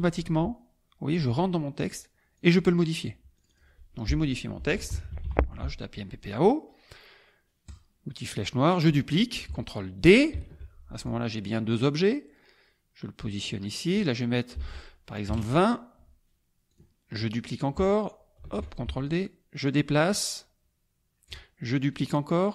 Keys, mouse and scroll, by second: 2.3 click, 3.3 click, 4.4-5.7 typing, 7.7 click, 10.3 ctrl+d, 11.1-14.1 drag, 14.6 ctrl+a, 15.3 KP_2, 15.4 KP_0, 16.7 click, 18.4 ctrl+d, 19.0-21.6 ctrl+drag.